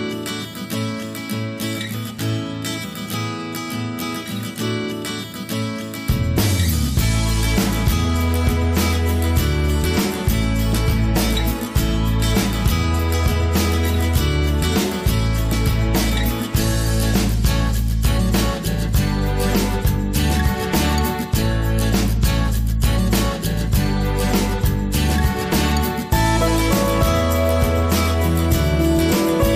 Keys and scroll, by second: 0.4 ctrl+v, 1.4 Return.